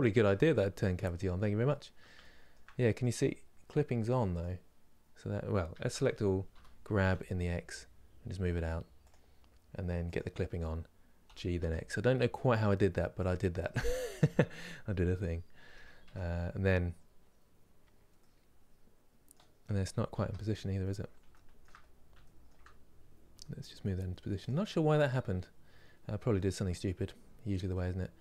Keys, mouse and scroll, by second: 4.0 click, 9.7 click, 11.0 g, 13.3-15.7 middle drag, 15.7 Tab, 17.3-17.9 scroll down 2, 17.9-19.9 middle drag, 19.9 KP_7, 20.5-20.8 scroll up 2, 21.0 shift+middle click, 21.5 scroll up 2, 21.9-23.1 shift+middle drag, 23.1 g, 24.4-27.5 middle drag, 27.5 scroll down 2, 28.0-28.2 shift+middle drag.